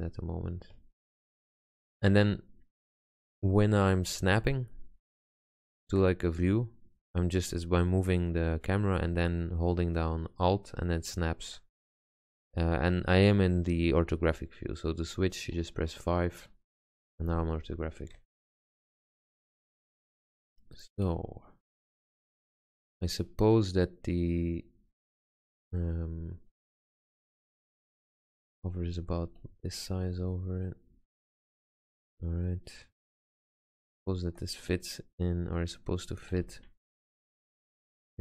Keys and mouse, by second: 4.3-6.4 middle drag, 8.4-13.3 middle drag, 14.3 KP_5, 15.2 KP_5, 15.6 KP_5, 16.6 KP_5, 19.2 r, 21.2 middle click, 26.8 g, 28.1 g, 29.5 r, 30.3 s, 32.6 click, 36.5 g, 37.2 middle click.